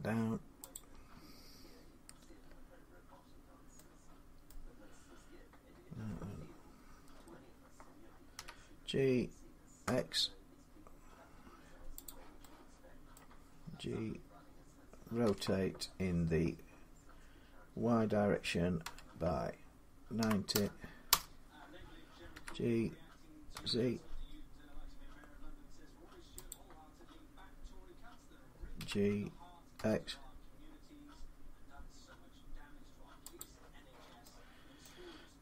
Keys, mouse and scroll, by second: 0.6 click, 3.1-4.3 drag, 4.3-9.4 middle drag, 8.2 g, 9.7 x, 11.9 click, 13.0 middle click, 15.1 r, 18.7 y, 20.0-20.4 typing, 20.9 Return, 22.2 g, 23.4 z, 25.3 typing, 26.3 click, 28.6-29.6 typing, 29.6-31.4 drag, 33.2-34.7 drag, 34.7-35.4 middle drag.